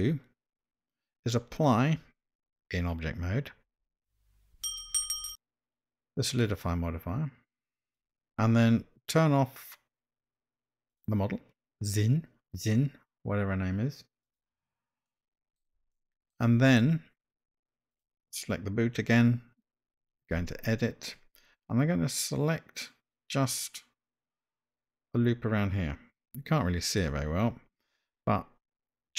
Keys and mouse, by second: 3.8 Tab, 6.5-8.1 drag, 10.9 click, 14.2 click, 15.2 middle click, 15.9-16.4 shift+middle drag, 17.9 click, 20.6 Tab.